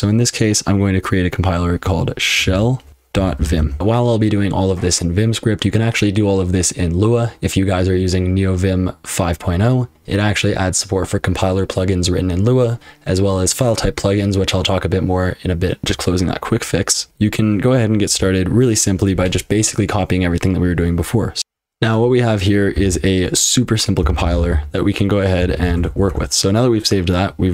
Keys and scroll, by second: 2.1-16.4 typing, 18.1 i, 21.4 super+l, 21.4 Escape, 21.4 F12, 21.4 typing, 22.7 j, 23.8-26.2 typing.